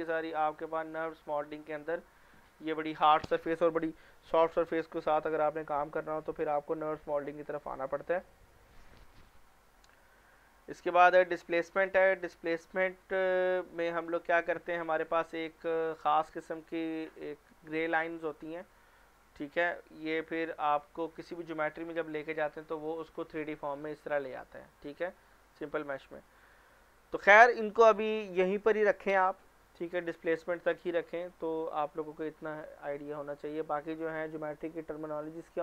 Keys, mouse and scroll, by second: 0.3-0.8 scroll down 1, 0.9 click, 2.9 click, 8.6 click, 12.0 click, 19.5 scroll down 1, 23.2 click, 26.4 click, 30.7 click, 33.2 click.